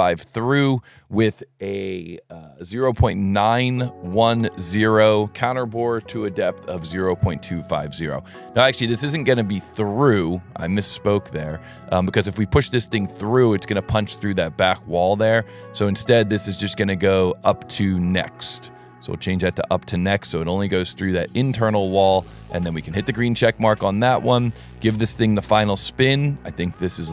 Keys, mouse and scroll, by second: 0.4 Tab, 0.9 Tab, 4.7 Tab, 7.2 Tab, 9.3 click, 11.6 click, 12.6 scroll up 1, 12.9-13.5 middle drag, 14.3-14.9 middle drag, 16.1 middle click, 17.9 click, 18.9 click, 19.4 scroll up 1, 19.9-20.6 middle drag, 23.0 click, 23.7 right click, 24.7-25.6 middle drag.